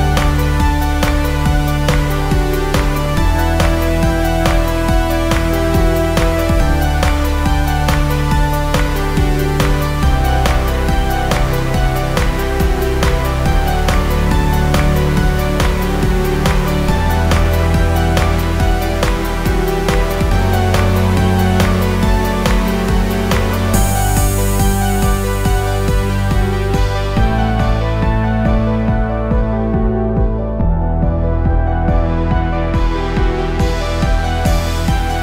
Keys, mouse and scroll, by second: 1.2-4.4 drag, 7.2 click, 16.5 click, 21.0 click, 27.0 click, 30.7 click, 33.1-35.2 typing.